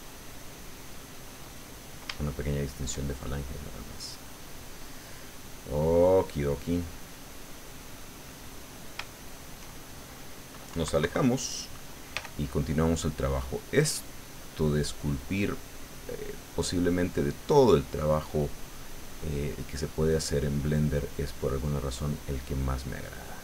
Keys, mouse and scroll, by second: 0.0 ctrl+click, 0.6 ctrl+click, 1.6 ctrl+middle click, 2.2-3.4 ctrl+shift+middle drag, 3.4-5.2 drag, 5.3 click, 6.6 click, 8.3 click, 9.1 shift+click, 10.7 KP_Subtract, 12.1 f, 12.5 click, 13.3-19.3 drag, 19.3-21.1 middle drag, 21.4-23.4 drag.